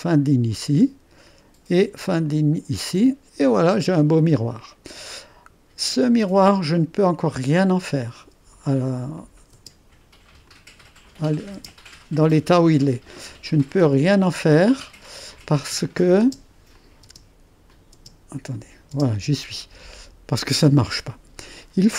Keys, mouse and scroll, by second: 0.0-1.1 drag, 2.2-3.3 drag, 4.5 middle click, 4.5-5.1 scroll up 1, 7.3 click, 9.1-13.9 drag, 9.5 space, 11.5 space, 15.3-17.2 drag, 17.0 space, 17.7 click, 17.9 space, 18.5 click, 18.9 click, 18.9 space.